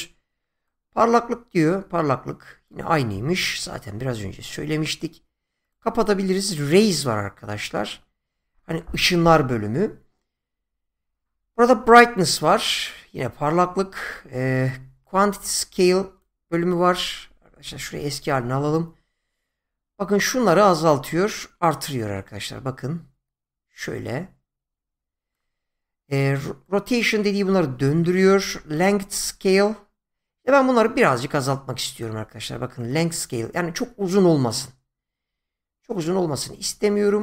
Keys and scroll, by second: 3.2 ctrl+z, 17.4 ctrl+z, 28.3 ctrl+z.